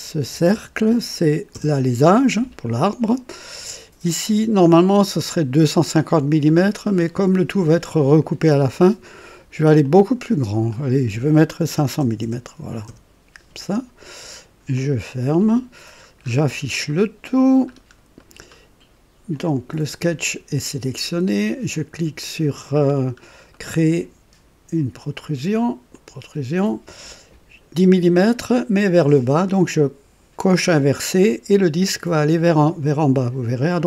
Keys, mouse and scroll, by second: 0.2 KP_4, 0.5 KP_0, 0.7 KP_0, 1.5 Return, 1.7 Return, 5.1-6.6 drag, 6.7 scroll down 2, 9.8 click, 10.7 click, 11.7 KP_5, 12.0 KP_0, 12.2 KP_0, 12.8 Return, 12.9 Return, 14.7 click, 15.7-16.8 scroll down 3, 16.5 typing, 16.9 right click, 17.7 scroll up 1, 18.2 right click, 19.3 click, 22.8 scroll up 2, 23.5-24.2 right drag, 25.9 click.